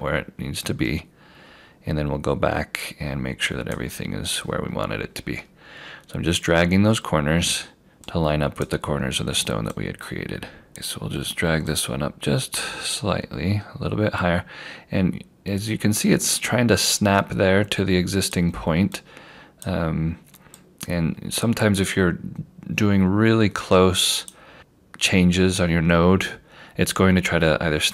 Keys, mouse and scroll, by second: 0.7-2.9 scroll up 1, 2.9 click, 4.6 scroll down 1, 6.0 scroll up 1, 8.1 click, 10.7 scroll down 1, 11.7 click.